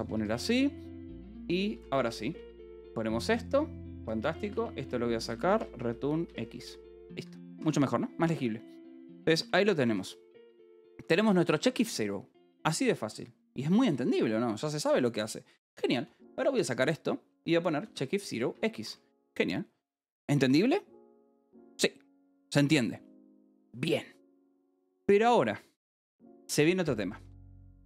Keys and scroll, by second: 0.1 Escape, 0.7-2.6 typing, 2.4 Escape, 4.3-6.8 typing, 6.2 Escape, 6.9 Return, 7.1 Escape, 8.1 ctrl+s, 8.8-13.9 typing, 9.5 Escape, 11.7 Escape, 16.5 c, 18.4 ctrl+g, 18.5 Escape, 19.3 ctrl+s, 27.5-27.8 typing.